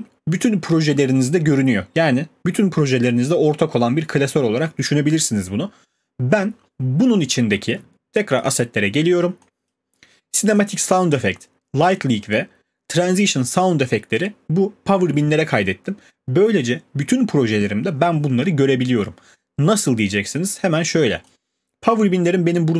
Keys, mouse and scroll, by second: 6.7 click, 8.5 click, 9.7 click, 10.6 click, 11.9 click, 13.0 click, 21.3 click.